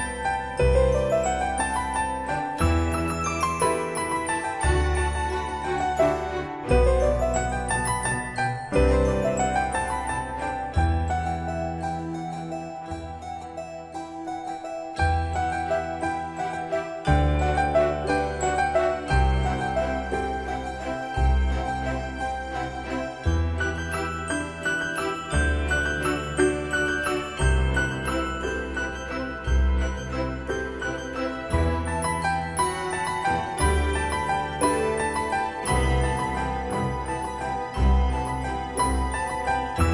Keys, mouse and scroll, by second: 0.3-1.1 typing, 0.9-6.9 drag, 7.1 Escape, 13.4 click, 17.2 right click, 18.6 click, 23.2 right click, 24.3 Escape, 26.3 typing, 27.9-28.9 drag, 30.3 typing, 32.1 click, 35.3 typing, 36.6 Escape, 38.7 click.